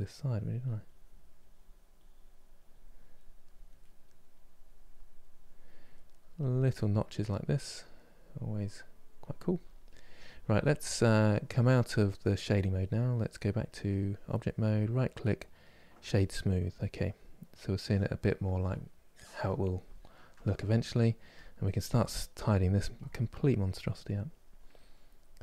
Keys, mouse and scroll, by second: 3.4 middle click, 4.0-6.6 drag, 6.6 middle click, 7.6 click, 8.3 middle click, 8.9-11.7 drag, 11.7-13.9 middle drag, 13.9-15.7 drag, 15.7 right click, 16.1-22.6 middle drag, 22.6-25.4 drag.